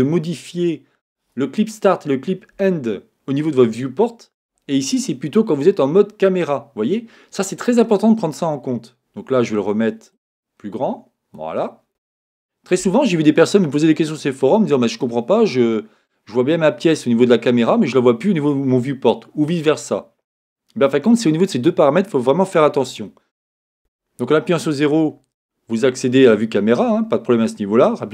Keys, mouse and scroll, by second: 10.1-11.9 drag, 14.7-16.6 middle drag.